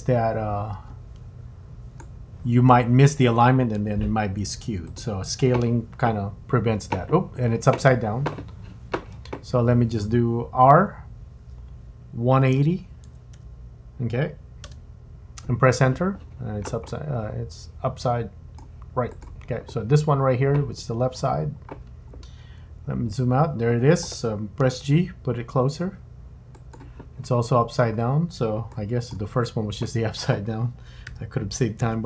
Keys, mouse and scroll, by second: 4.9 click, 11.4 r, 16.9 middle click, 19.1 click, 20.9 scroll up 3, 21.1 scroll down 6, 22.9-24.1 scroll down 5, 24.6 g, 27.4 scroll up 6, 28.7 shift+middle click, 31.1 r.